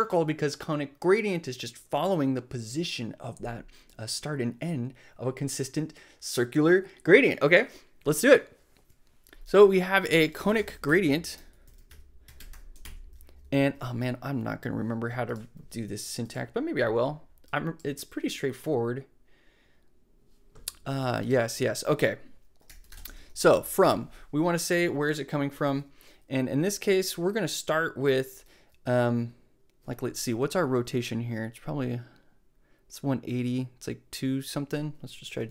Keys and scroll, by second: 10.1-13.3 typing, 22.4-23.4 typing, 35.0-35.5 typing.